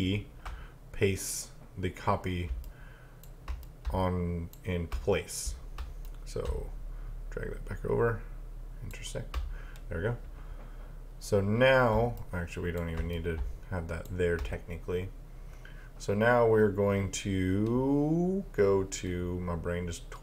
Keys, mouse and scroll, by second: 2.7 click, 3.7 click, 6.1 click, 12.2 click, 13.2 click.